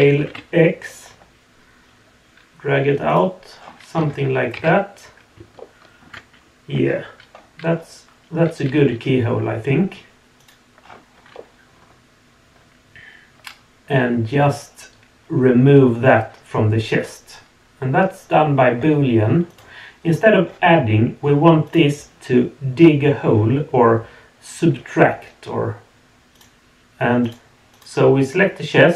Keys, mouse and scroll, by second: 3.5 scroll down 2, 4.0 Tab, 4.6 z, 5.6-6.0 shift+middle drag, 7.7 scroll up 2, 8.7 g, 10.8 scroll down 2, 11.3-15.5 middle drag, 19.5 click, 21.6 click, 26.3 click, 27.2 click, 27.7 click.